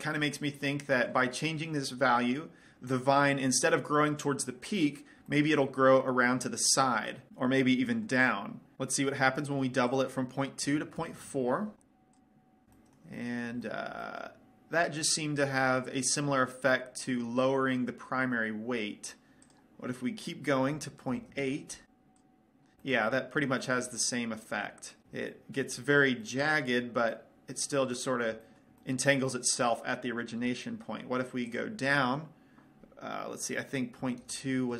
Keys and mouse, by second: 5.8-7.3 middle drag, 8.1 middle click, 10.4-12.0 drag, 12.6 click, 13.0-16.8 middle drag, 16.9 middle click, 19.9-21.7 drag, 22.6-23.7 drag, 23.7-32.0 middle drag, 32.0-33.8 drag.